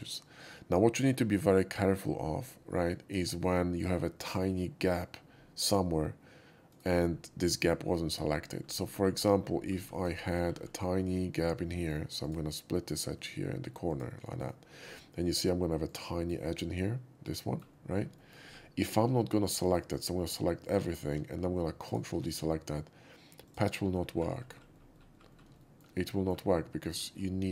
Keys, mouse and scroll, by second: 6.1 typing, 6.7 right click, 8.4 middle click, 8.8-9.6 scroll up 8, 10.0 click, 10.2 scroll up 4, 12.2 click, 12.2 middle click, 13.8 click, 14.3 middle click, 14.8 middle click, 15.8 click, 16.3-17.5 middle drag, 18.1 shift+middle click, 18.4 scroll down 1, 19.6 alt+right click, 20.6 alt+click, 21.8 ctrl+click, 23.4 ctrl+click, 23.9 scroll down 1, 24.9-25.3 scroll down 3, 25.5 shift+middle drag, 25.9 shift+middle click, 26.9-27.3 shift+scroll up 3.